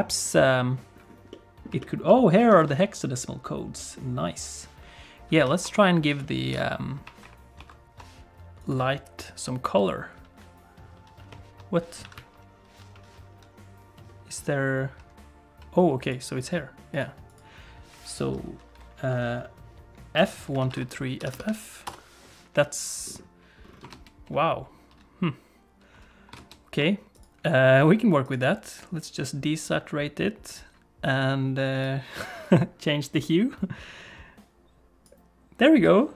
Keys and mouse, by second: 0.2 click, 1.3 middle click, 1.8 shift+middle click, 2.5 ctrl+s, 5.6 shift+F3, 6.5 n, 7.2 shift+F3, 7.6 shift+F3, 8.7 click, 12.0 a, 12.1 KP_Decimal, 16.0 click, 21.3 f, 26.4 ctrl+space, 27.2 click.